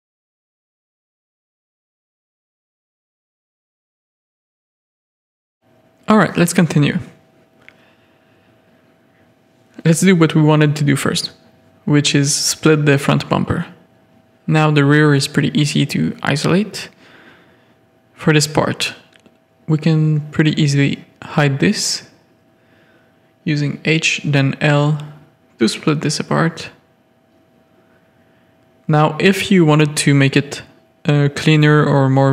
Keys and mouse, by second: 3.3 drag, 3.9 alt+a, 4.9-8.1 middle drag, 9.0 KP_3, 11.8 click, 12.3 z, 12.6-13.0 shift+middle drag, 13.0-13.4 middle drag, 13.9-14.9 middle drag, 15.3-15.6 middle drag, 16.2 middle click, 16.5 middle drag, 17.0 Tab, 17.1 a, 17.4 middle click, 18.2 3, 20.6 click, 22.1 ctrl+click, 23.2 h, 23.6 z, 24.0 click, 25.0 l, 25.9 alt+h, 27.4 Tab, 27.6 alt+a, 28.2 Tab, 28.3 click, 28.7 1, 29.1 ctrl+r, 30.2 ctrl+r, 31.7 drag, 32.0 Tab.